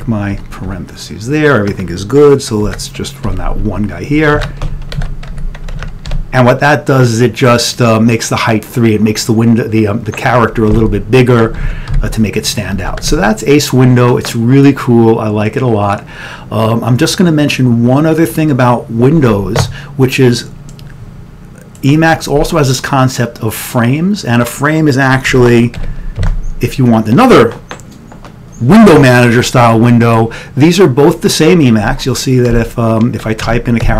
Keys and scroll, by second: 0.4-0.7 typing, 2.7 ctrl+x, 3.3 ctrl+e, 5.8 2, 11.2 1, 11.7 ctrl+x, 12.0 1, 12.9 ctrl+x, 25.4 ctrl+x, 25.9 5, 26.3 2, 33.5-33.9 typing.